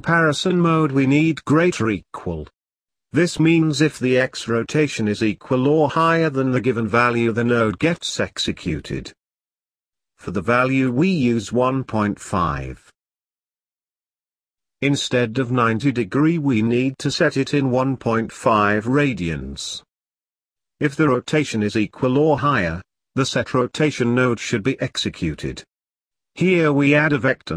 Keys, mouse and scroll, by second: 2.6 shift+a, 7.5-13.1 drag, 13.1 middle click, 13.7 scroll down 1, 13.8 middle click, 14.6 shift+a, 20.5 click, 22.7-25.6 drag, 25.6 shift+a.